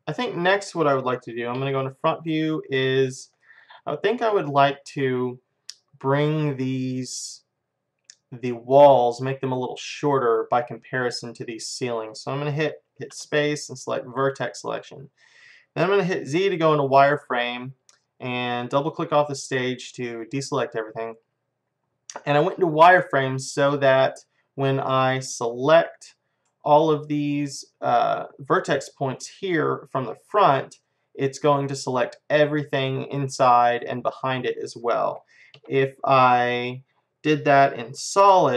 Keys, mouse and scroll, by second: 1.3-2.5 middle drag, 1.6 KP_1, 2.8-7.2 middle drag, 12.9 Tab, 13.1 space, 16.4 z, 18.6-20.8 drag, 24.9-26.8 right drag, 30.9-32.8 middle drag, 33.0-36.4 middle drag, 35.6 KP_1, 36.4-38.5 drag.